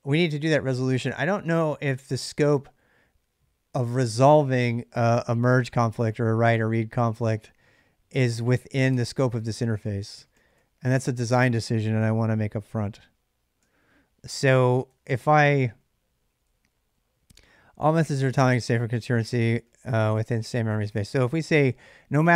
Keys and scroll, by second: 8.6 ctrl+[, 8.8 ctrl+l, 9.3 ctrl+[, 9.5 k, 9.6 k, 10.0 k, 10.1-10.7 k, 11.8-16.5 typing, 18.2-21.3 typing.